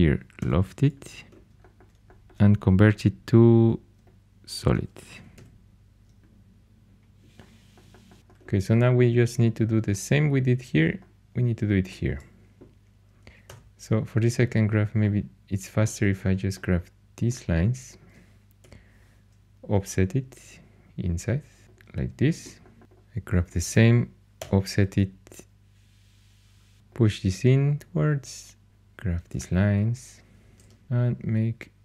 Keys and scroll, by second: 0.3 i, 2.0 4, 5.1 typing, 13.4 2, 18.5 o, 24.3 o, 28.6 2.